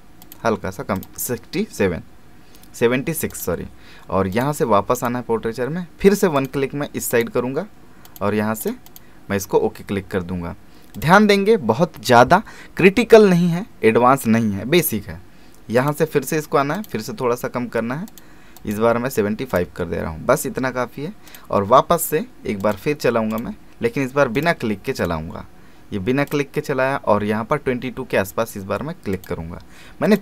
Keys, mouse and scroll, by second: 3.3 click, 15.8 click, 29.1 click.